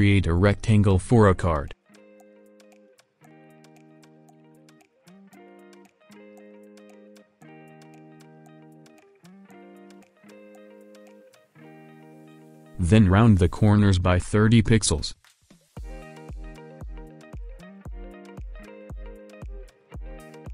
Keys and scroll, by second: 15.3-15.8 typing, 18.2 Return.